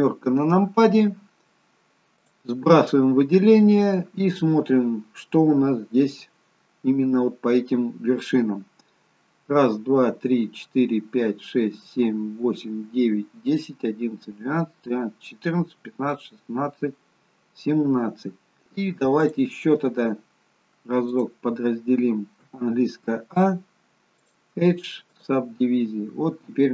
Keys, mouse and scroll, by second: 0.0 KP_7, 2.3 click, 18.6 click, 24.3 click, 24.3 a, 26.3-26.7 scroll up 1.